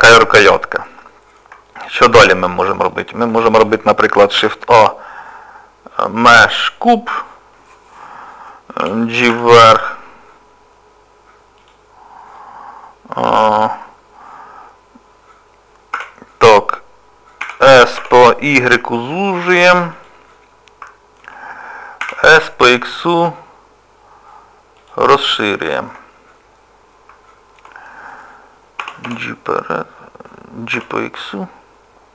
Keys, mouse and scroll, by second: 0.9 shift+middle click, 2.5 middle click, 2.9 middle click, 4.4 shift+a, 4.6 shift+middle click, 12.0 scroll up 1, 12.4 middle click, 16.0 Tab, 17.4 s, 20.3 middle click, 22.1 s, 25.2 scroll down 1, 25.7 shift+middle click, 26.2 middle click, 27.7-28.3 scroll down 1, 28.8 g.